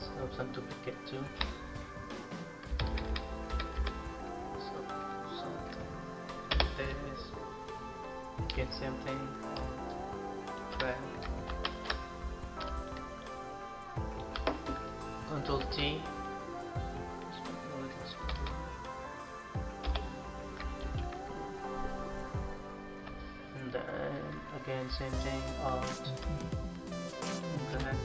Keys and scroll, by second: 2.5 Left, 2.7 Left, 2.9 Left, 3.3 Left, 3.6 Left, 11.3 ctrl+alt+shift+=, 12.5 space, 14.6 ctrl+space, 15.3 ctrl+t, 19.6 Return, 20.6 ctrl+-.